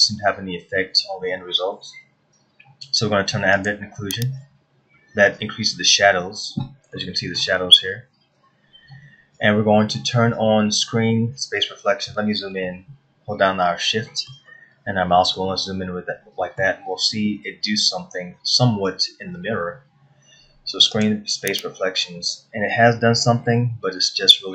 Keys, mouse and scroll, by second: 4.4 click, 7.5 shift+middle click, 13.3 shift+middle click, 15.3-15.8 scroll up 3, 16.1 shift+middle click, 21.8 click, 23.5 scroll down 1, 24.2 middle click.